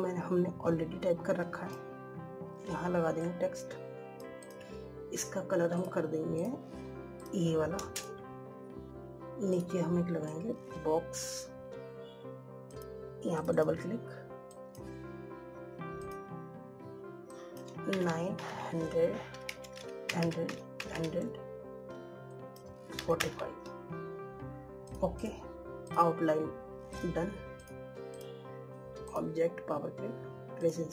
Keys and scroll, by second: 20.3 ctrl+a.